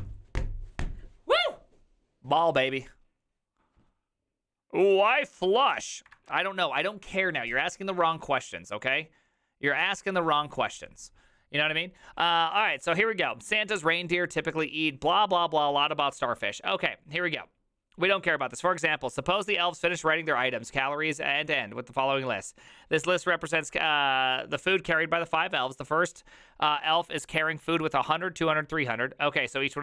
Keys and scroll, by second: 6.2 alt++.